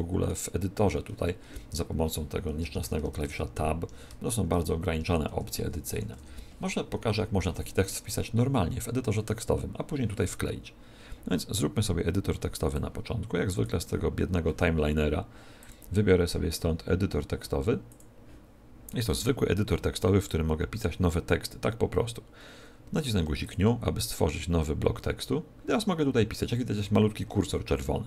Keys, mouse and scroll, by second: 1.4 Tab, 2.6-5.8 typing, 5.2 Tab, 12.7 click, 15.5 click.